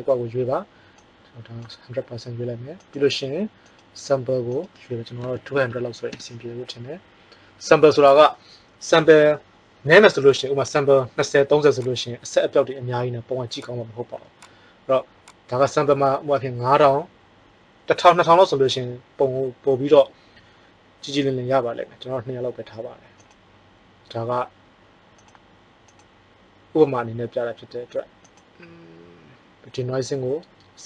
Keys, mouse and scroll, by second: 16.3 KP_0.